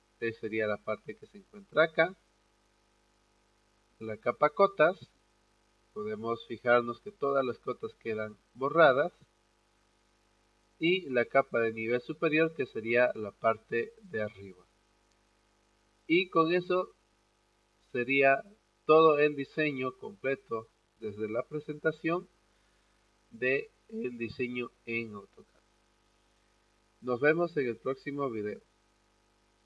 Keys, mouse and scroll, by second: 15.4 click, 27.8 click.